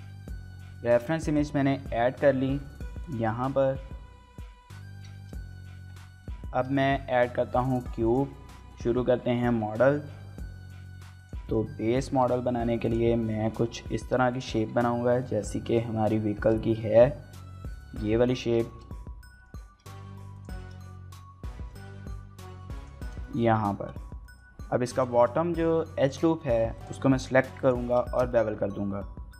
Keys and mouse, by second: 0.4 click, 0.8 shift+middle click, 1.1 middle click, 2.1 y, 3.0 click, 5.1 shift+middle drag, 5.4 middle click, 6.1 shift+middle click, 6.4 shift+a, 8.4 shift+middle drag, 8.6 middle click, 9.3 shift+middle drag, 9.5 middle drag, 10.1 z, 11.2 click, 11.4 shift+middle click, 11.6 middle click, 12.0 s, 12.2 z, 12.8 click, 13.1 middle click, 13.3 s, 13.5 x, 14.3 drag, 14.7 shift+middle click, 14.9 middle click, 15.6 shift+middle drag, 15.9 middle click, 16.4 shift+middle click, 16.6 middle drag, 18.7 shift+middle drag, 18.9-19.5 middle drag, 19.8 x, 20.3 click, 20.6 shift+middle click, 20.8-21.7 middle drag, 21.9 s, 22.1 x, 22.7 click, 23.0 shift+middle click, 23.2 middle click, 23.4 Tab, 24.0 shift+middle click, 24.2 middle click, 24.6 2, 24.9 click, 25.2 shift+middle click, 25.4 middle click, 26.4 shift+middle click, 27.6 alt+shift+click, 28.1 shift+middle click, 28.3 middle click, 29.2 ctrl+b.